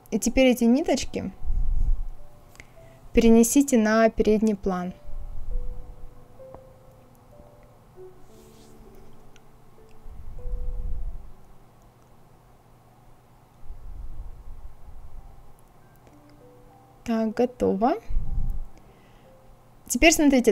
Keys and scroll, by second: 19.9 KP_0, 20.0 Return, 20.1 KP_0.